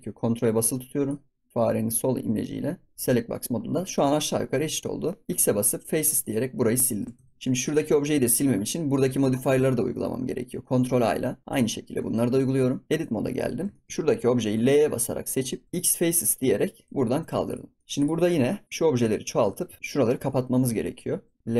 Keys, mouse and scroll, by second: 3.6-3.9 scroll down 3, 3.9 scroll up 4, 4.1 scroll down 1, 4.7 scroll down 2, 5.0 middle click, 5.3 x, 6.6 middle click, 7.1 Tab, 7.6 click, 7.9 ctrl+s, 8.0 scroll down 3, 8.2 shift+middle drag, 8.5 scroll up 5, 8.9-9.5 scroll down 1, 9.5-10.1 scroll up 3, 10.1 ctrl+a, 12.1 ctrl+a, 12.7 scroll down 1, 12.8 middle click, 13.0-13.5 scroll up 6, 13.7 shift+middle click, 13.9 right click, 14.5 l, 15.6 x, 16.4 scroll down 5, 16.8 Tab, 17.2 ctrl+s, 17.4 click, 17.7 middle click, 17.8 ctrl+s, 17.9 click, 18.2 scroll up 4, 19.0 click, 19.2 scroll down 4, 19.5 ctrl+s, 19.7-21.3 shift+middle drag, 21.3 Tab, 21.4 l.